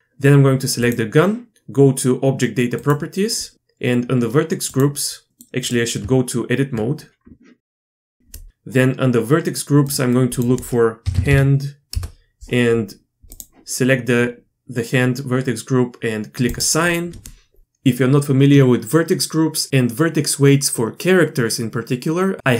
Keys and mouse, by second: 0.9-2.9 drag, 4.7-5.7 drag, 6.0 Tab, 8.0 click, 9.9 click, 10.3-12.5 drag, 13.3 click, 16.6-17.6 drag.